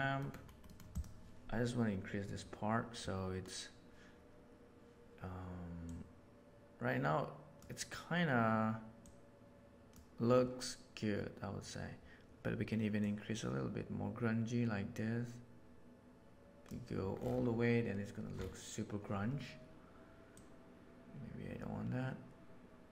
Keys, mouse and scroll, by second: 0.1 middle click, 5.8-7.5 drag, 9.0 click, 13.1-16.6 drag, 20.3-20.8 drag.